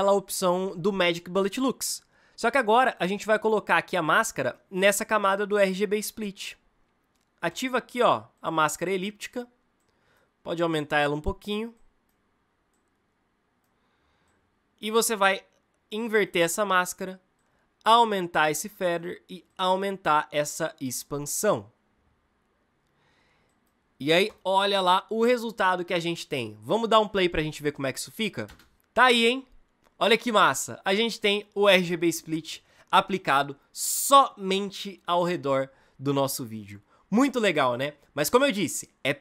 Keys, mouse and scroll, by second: 28.3 space.